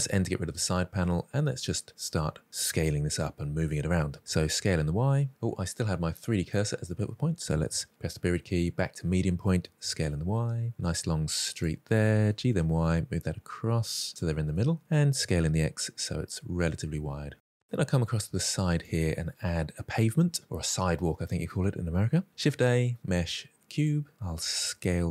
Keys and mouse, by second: 0.0 n, 1.8 shift+middle drag, 4.1 s, 4.4 y, 9.4 s, 9.6 y, 12.0 g, 12.2 y, 14.2-14.7 middle drag, 15.0 s, 15.1 x, 17.4 shift+middle click, 18.5 shift+right click, 21.7 shift+a.